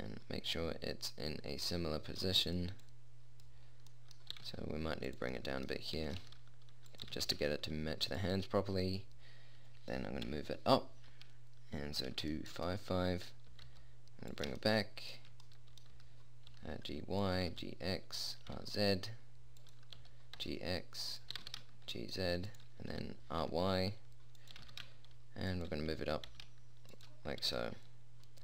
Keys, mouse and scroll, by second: 0.2 click, 0.9-3.2 middle drag, 3.2-5.0 drag, 4.7 g, 5.0 middle click, 6.3 r, 7.4 g, 10.6 Up, 13.8 g, 16.3 g, 17.8 g, 18.8 r, 20.4 g, 21.7 g, 23.3 r, 24.9 g, 26.4 g.